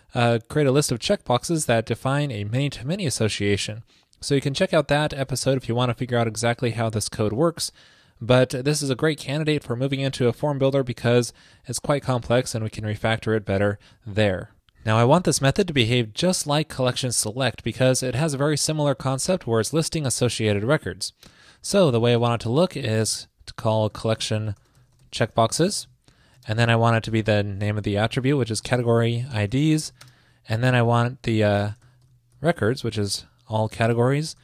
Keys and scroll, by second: 22.2 ctrl+shift+>.